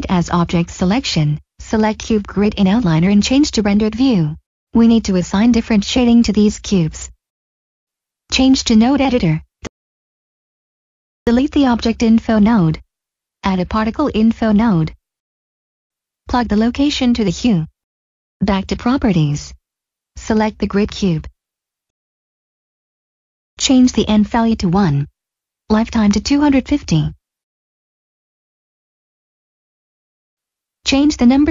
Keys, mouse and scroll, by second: 2.2 click, 4.6 middle click, 4.9 click, 7.6 click, 10.2 click, 11.8 Delete, 13.1 click, 20.2 click, 22.7 click, 25.6 Return, 26.1 click, 27.5-28.9 typing, 29.8 Return, 29.9-30.4 typing, 31.4 Return.